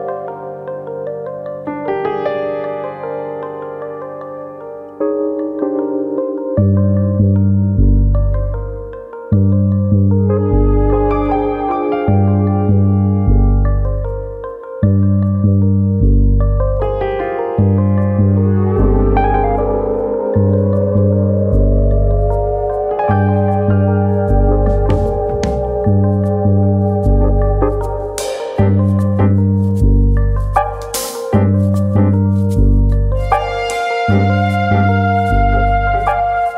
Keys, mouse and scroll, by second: 0.4 ctrl+r, 1.2 right click, 1.4 middle click, 2.2 ctrl+z, 2.5 middle click, 2.9 shift+middle click, 3.1 middle click, 3.8 middle click, 3.8 shift+middle click, 4.4 click, 4.8 shift+click, 5.5 g, 6.5 right click, 6.7 middle click, 7.1 click, 7.9 middle click, 8.3 middle click, 8.6-9.2 scroll down 2, 8.9 middle click, 9.4 middle click, 10.0 shift+middle click, 10.3 shift+middle click, 11.0 alt+click, 11.2 middle click, 11.8 click, 13.2 alt+click, 13.5 middle click, 14.0 click, 15.0 middle click, 15.3 scroll down 1, 15.5 middle click, 15.9 middle click, 16.8 alt+click, 17.0 middle click, 17.5 click, 18.4 middle click, 19.3 alt+click, 19.8 click, 20.4 middle click, 20.8 scroll up 2, 20.9 shift+middle click, 21.2 middle click, 21.8 middle click, 22.1 shift+middle click, 22.1-22.8 scroll down 7, 22.5 middle click, 22.8 Tab, 23.1 middle click, 23.8-24.2 scroll down 1, 24.7 middle click, 25.2 middle click, 25.9-26.2 scroll up 1, 26.4 KP_1, 27.0-27.4 scroll up 4, 27.4 Tab, 27.7 middle click, 28.3-28.9 scroll up 2, 29.6 ctrl+r, 30.5 right click, 30.9 middle click, 31.4 right click, 33.0 middle click, 34.0 click.